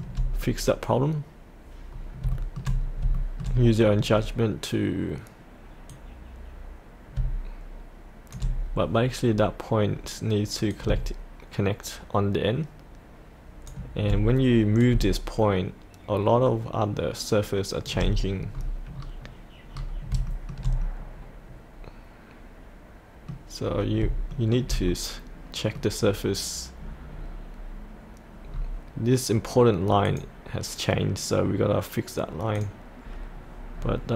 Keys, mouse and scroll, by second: 0.4-1.9 scroll down 1, 2.3 shift+middle click, 2.8 scroll up 1, 3.1 shift+middle click, 3.7-5.9 scroll down 1, 5.9-8.3 drag, 9.3-9.8 scroll down 1, 10.7-13.6 drag, 14.8-17.8 drag, 18.1-20.1 scroll up 1, 20.3 shift+middle click, 20.8-23.6 middle drag, 23.6-24.0 scroll up 1, 24.3 shift+middle click, 24.9 middle click, 26.1-28.5 scroll down 1, 30.1 click, 33.8-34.1 scroll down 1.